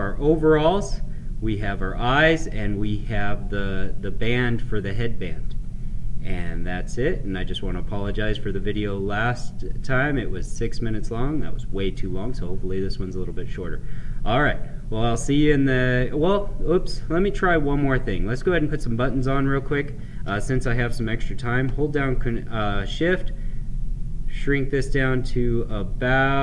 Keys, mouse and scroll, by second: 6.2-13.4 right drag, 17.5-21.7 drag, 21.7-26.4 shift+drag.